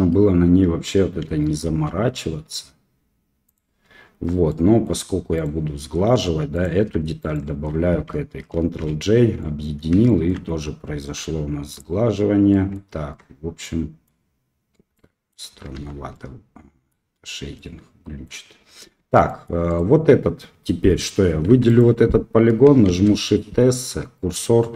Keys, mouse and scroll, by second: 1.6 ctrl+b, 4.0 Tab, 4.4-4.8 drag, 5.3-6.9 right drag, 7.1 shift+right click, 8.8 ctrl+j, 9.3-9.6 middle drag, 9.6 click, 10.0 shift+drag, 11.1 q, 12.5 click, 13.0 Tab, 13.6 click, 14.9 middle click, 15.7 Tab, 16.1 middle click, 17.5-18.2 middle drag, 18.6 scroll up 1, 19.0 Tab, 19.2 middle click, 19.6 click, 21.5 3, 21.6 click, 22.8 shift+s.